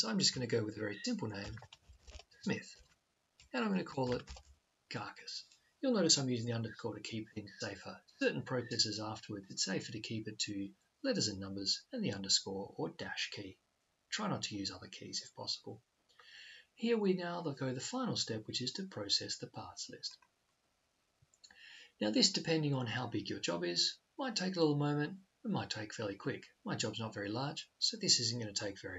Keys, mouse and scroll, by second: 20.0-21.8 drag.